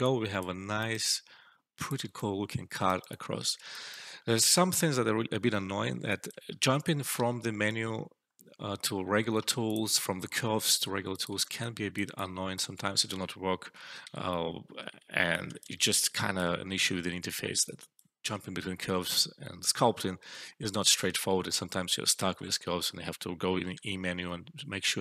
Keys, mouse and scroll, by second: 2.1-2.7 alt+click, 2.8-3.9 alt+right click, 3.6 alt+shift+right click, 3.9 alt+middle click, 5.6 alt+middle click, 6.0 alt+click, 7.1 e, 8.1-8.4 scroll up 1, 9.6 click, 10.8 alt+middle click, 11.0-11.9 alt+drag, 12.9 ctrl+z, 13.9 ctrl+z, 15.0 alt+middle click, 15.2 alt+click, 15.8 alt+middle click, 16.0 alt+click, 17.2 alt+middle click, 17.5 alt+click, 23.7 e, 24.9 click.